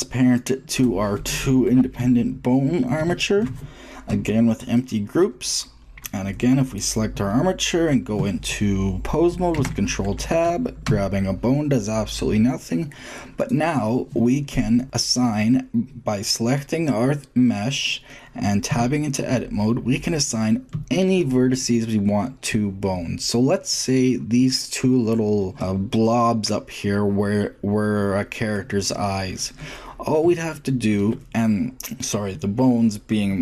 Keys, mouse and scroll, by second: 2.8 ctrl+shift+p, 6.5-8.4 drag, 9.3 ctrl+Tab, 10.7 g, 14.6-15.6 drag, 15.6-17.0 middle drag, 17.6-18.3 drag, 18.5 Tab, 20.9 click, 22.6-23.6 shift+middle drag, 23.7 middle click, 24.3-26.3 middle drag, 28.6-31.8 middle drag, 31.8 shift+click.